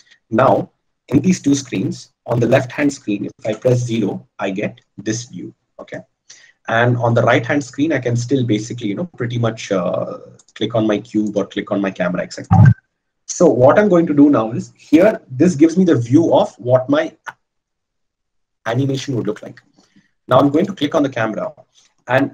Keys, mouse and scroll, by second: 4.1 KP_0, 4.4 KP_0.